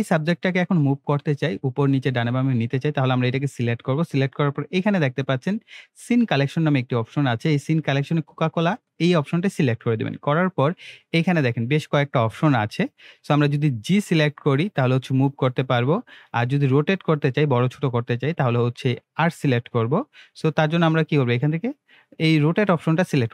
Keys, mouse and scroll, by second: 20.9-21.5 drag.